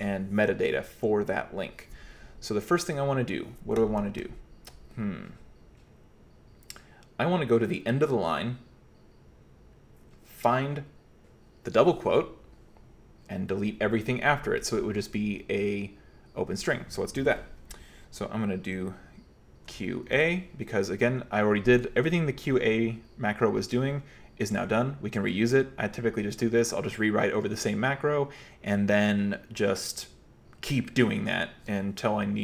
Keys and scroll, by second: 19.7 q, 20.1 a.